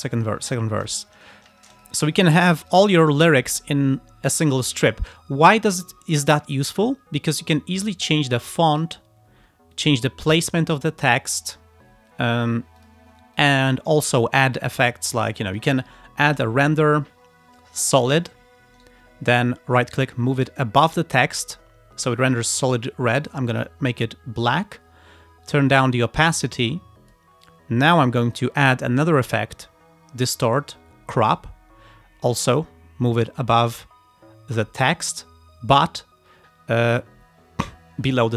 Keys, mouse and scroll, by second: 1.3 ctrl+scroll down 2, 1.8 ctrl+click, 2.7 alt+click, 7.6-9.0 drag, 9.0-9.3 scroll down 2, 9.8-11.6 drag, 11.9-12.5 scroll up 4, 12.8 click, 13.4 click, 17.9 click, 18.8 right click, 20.4 click, 22.8 click, 23.6 click, 24.6 click, 25.5-27.4 drag, 28.4 click, 31.3 click, 32.4 right click, 33.2 click, 34.3 scroll down 1.